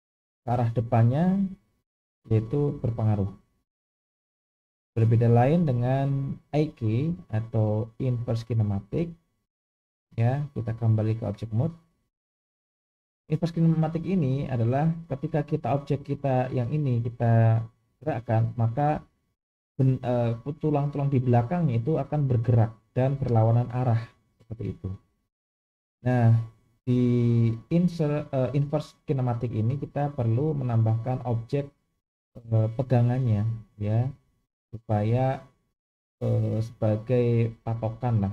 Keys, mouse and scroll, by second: 10.5-11.3 drag, 12.6 click.